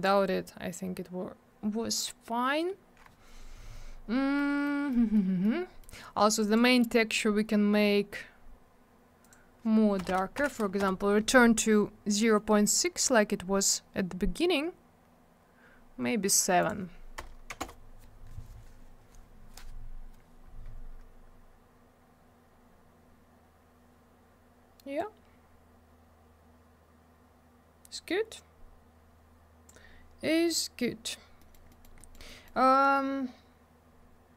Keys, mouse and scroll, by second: 0.0 click, 4.4 middle click, 4.9 middle click, 5.4 middle click, 6.3 click, 6.4 click, 6.4 click, 6.5 double click, 9.2 click, 9.3 click, 10.0 BackSpace, 10.4 6, 10.8 Return, 16.6 click, 16.7 click, 17.2 BackSpace, 17.5 7, 17.6 Return, 20.8 scroll up 1, 21.9-23.2 scroll down 1, 25.0 click, 30.6-30.9 scroll up 1, 31.1 scroll down 1, 31.4 middle click, 31.5 middle click, 31.7 middle click, 31.8 double middle click, 32.0 middle click, 32.1 middle click, 32.3 middle click, 32.4 double middle click.